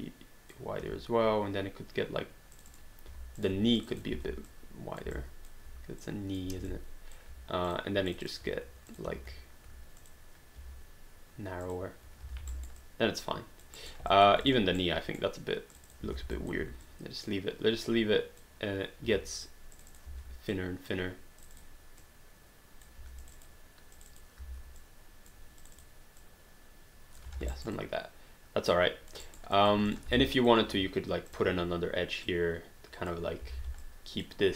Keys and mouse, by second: 0.0-0.8 typing, 2.5 click, 3.1 q, 3.4 click, 3.8 shift+click, 4.5 click, 5.1 alt+click, 6.0 click, 7.1 alt+click, 7.6 click, 8.9 click, 9.1 q, 10.0 click, 10.6 q, 12.4 alt+d, 12.5 alt+right click, 12.8 alt+click, 13.8 alt+right click, 14.1 alt+click, 14.4 click, 14.8 right click, 15.7 click, 16.0 r, 16.3 alt+click, 16.9 click, 19.1 q, 19.4 click, 20.1 r, 20.5 click, 23.0 q, 23.2 click, 24.4 r, 24.8 click, 27.4 alt+d, 27.6 alt+right click, 27.7 alt+click, 29.2 alt+right click, 29.6 alt+click, 29.9 click, 30.2 alt+click, 31.3 click, 33.6 alt+d, 33.8 alt+click.